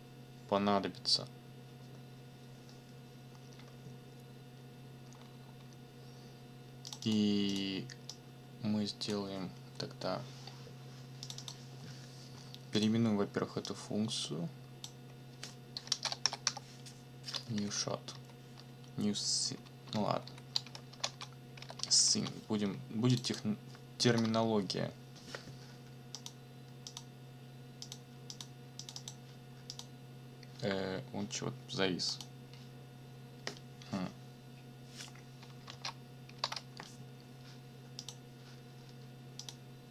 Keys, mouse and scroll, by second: 5.1-5.8 scroll up 2, 6.9 click, 7.5 click, 8.1-9.3 drag, 11.2 click, 12.7 click, 13.6-15.0 drag, 15.7-16.9 typing, 15.7 shift+click, 17.5 Left, 19.1 Right, 20.0 shift+Left, 20.7-22.1 typing, 23.1 click, 24.1 ctrl+c, 26.1 click, 26.9 click, 27.8 click, 28.3 click, 29.7 click, 32.1 click, 35.7 alt+Tab, 36.4 alt+Tab, 38.0 click, 39.4 click.